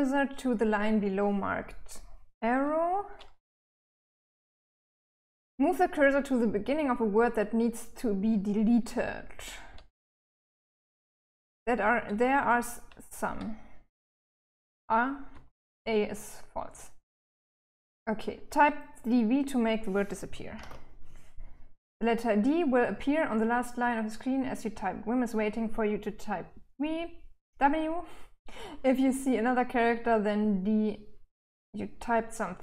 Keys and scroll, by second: 3.3 k, 3.6 k, 3.8 k, 9.1 l, 9.6 l, 9.8 l, 10.3-11.4 l, 14.7 h, 15.1 h, 19.7-20.5 typing.